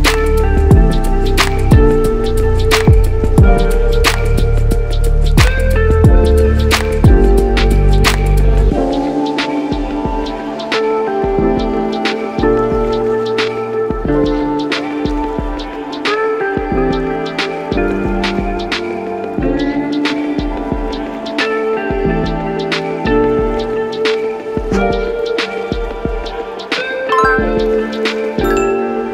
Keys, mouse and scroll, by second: 8.4 click, 11.1-16.3 drag, 18.0 click, 20.9 click, 22.4-23.5 alt+middle drag, 25.3 click, 26.6 click, 27.8 click.